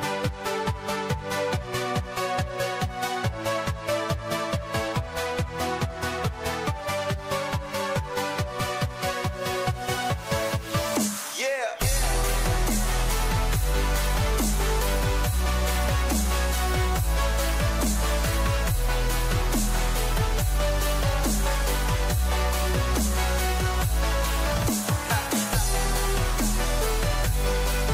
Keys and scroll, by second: 4.6 ctrl+alt+z, 10.0 ctrl+alt+z, 12.4 ctrl+-, 12.8 ctrl+0, 13.4 ctrl+-, 13.6 ctrl+=, 15.1 ctrl+-, 15.4 ctrl+0.